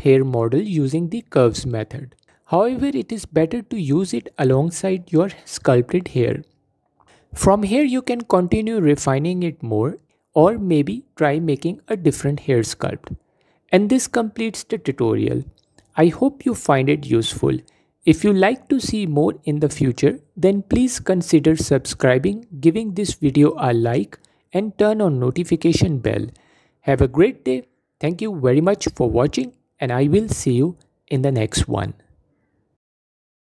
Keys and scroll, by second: 7.3 Tab, 12.2 Tab.